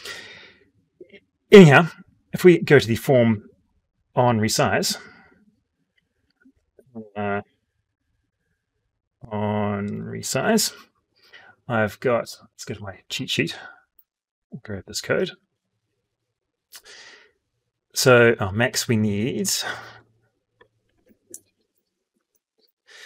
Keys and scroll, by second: 13.6 ctrl+c, 15.3 ctrl+v.